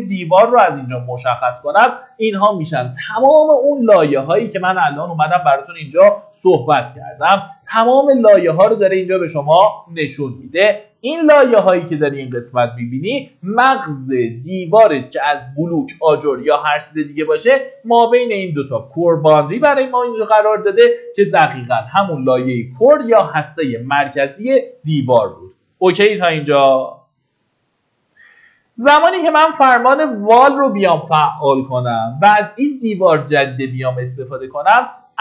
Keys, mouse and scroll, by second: 5.4-6.3 scroll down 1, 6.3-7.6 scroll up 1, 8.0-27.4 drag, 27.6 middle click, 28.0-28.7 scroll down 1, 28.7 middle click, 29.1 Escape, 29.8 typing.